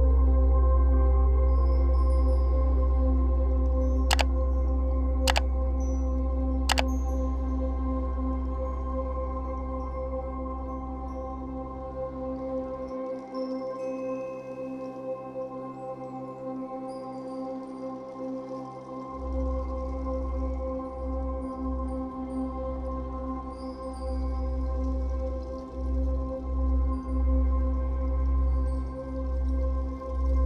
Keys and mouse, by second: 1.2 ctrl+z, 8.2 ctrl+z, 11.0 click, 21.0 z, 22.2 z, 23.3 click, 24.7 z, 26.9 ctrl+z, 29.8 click.